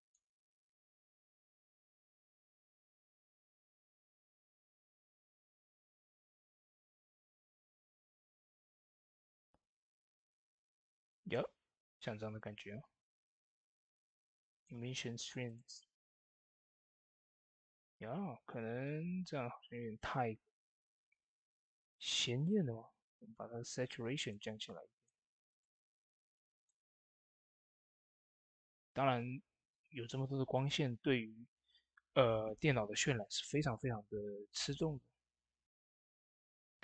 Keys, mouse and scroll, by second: 2.8 click, 2.8 typing, 2.8-7.0 drag, 14.3 click, 14.3 typing, 17.6 click, 24.0 click, 24.0 typing, 24.0-32.5 drag.